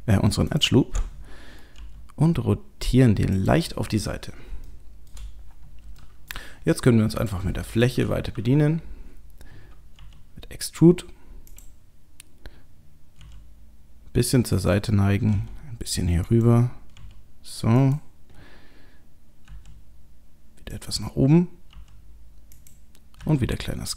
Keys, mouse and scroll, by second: 0.5 alt+shift+click, 1.8 r, 4.2-4.5 scroll down 1, 4.7 shift+middle click, 6.0 middle click, 7.2 click, 7.7 click, 8.3 KP_3, 10.0 e, 13.2 r, 15.3 g, 17.0 r, 19.5 s, 21.7 e, 23.2 s.